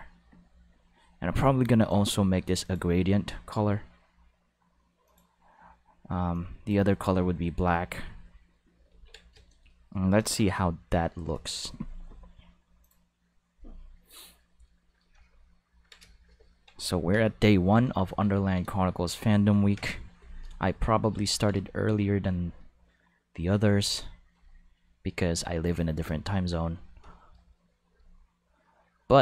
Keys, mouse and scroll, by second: 1.8 click, 2.6 click, 5.0 click, 6.3 click, 8.9 ctrl+s, 12.8 click, 14.1 click, 17.1 Home, 19.7 Home, 24.3 click, 26.0 click, 26.3 click, 29.0 click.